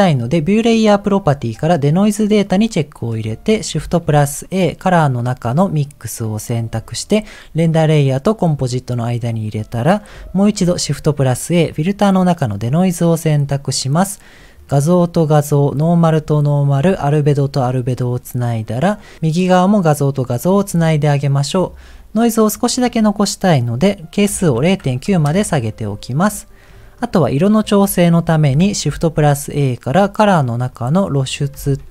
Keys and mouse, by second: 2.5 click, 4.0 shift+a, 10.6 shift+a, 13.6 click, 14.3 click, 16.1 click, 17.6 click, 18.7 click, 19.5 click, 20.5 click, 21.0 click, 22.8-25.2 drag, 26.8 middle click, 28.8 shift+a, 31.6 shift+a.